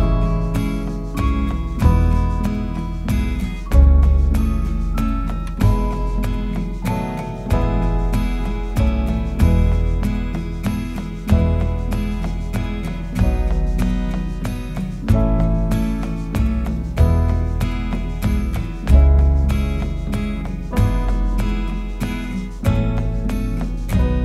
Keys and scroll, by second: 6.4-8.4 typing, 10.7 2, 14.0-14.9 typing.